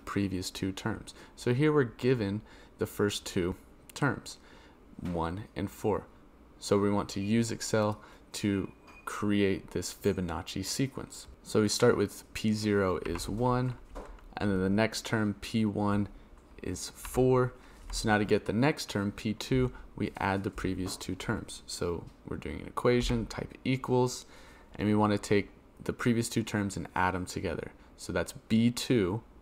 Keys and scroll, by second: 22.9 =.